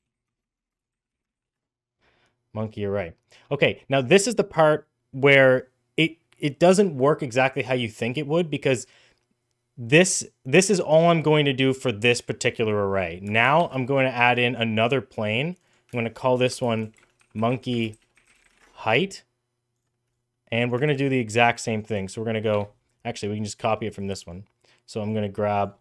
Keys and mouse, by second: 13.5 shift+a, 15.4 click, 15.5-18.9 shift+drag, 19.7 click, 20.7 shift+a, 23.4 click, 24.1 middle click, 25.0 click.